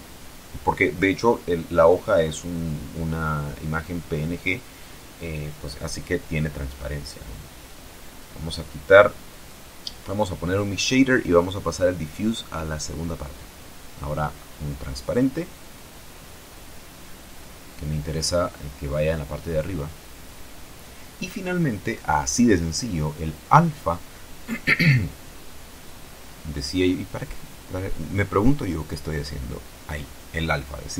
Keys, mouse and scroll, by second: 0.0 click, 1.5 click, 2.8 click, 3.9 shift+a, 6.9 click, 7.8 click, 8.9 click, 9.8 click, 11.5 shift+a, 14.1 click, 17.1 click, 18.4 click, 20.0-21.5 drag, 23.0 shift+click, 24.3 shift+a.